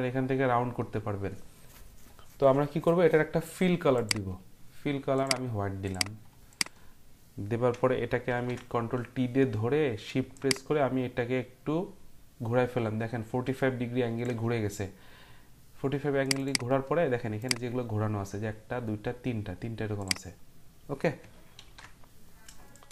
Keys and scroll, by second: 8.3 ctrl+t, 21.6 ctrl+t.